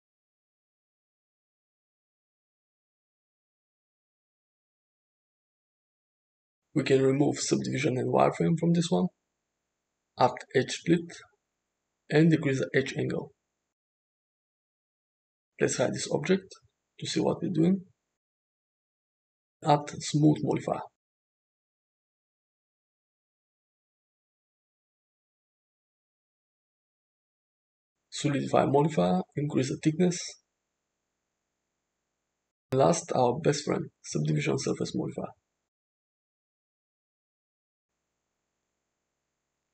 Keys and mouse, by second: 1.2 middle click, 1.8-5.9 shift+drag, 8.3 click, 9.5-10.8 drag, 12.1 click, 16.0 click, 18.6 click, 19.4-20.7 drag, 22.1 click, 22.3 click, 23.4 ctrl+z, 23.5 ctrl+z, 26.2-28.2 drag, 29.4-31.2 shift+drag, 32.4 click, 33.3-35.5 drag, 36.6 click.